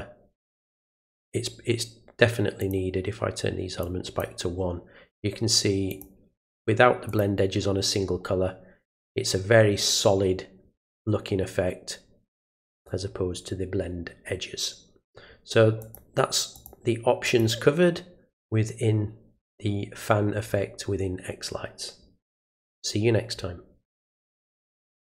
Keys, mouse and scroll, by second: 0.4 click, 0.9 click, 2.6 click, 3.8 click, 5.9 click, 7.1 click, 12.7 click, 15.8 click, 16.5 click, 17.2 click, 24.9 click.